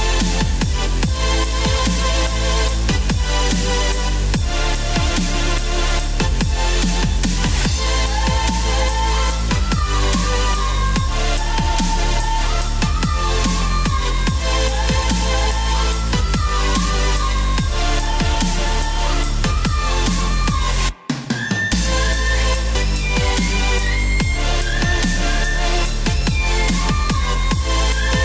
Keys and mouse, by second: 0.0-0.1 typing, 2.3 click, 4.4 click, 5.5 click, 6.8 click, 7.7 click, 8.4 click, 9.3 click, 11.0 right click, 11.8 click, 12.9 KP_4, 13.7 KP_6, 14.8 KP_Add, 15.0 KP_Add, 15.3 KP_Add, 16.2-21.7 typing, 22.3 Return, 26.7 click.